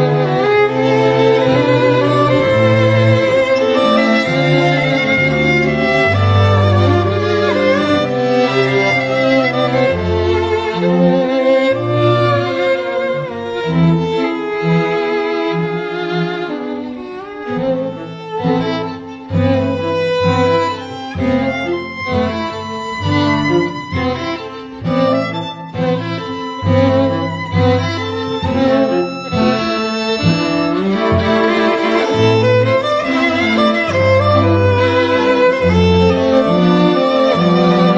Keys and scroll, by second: 8.3 ], 24.2 [, 24.9 [, 34.5 ].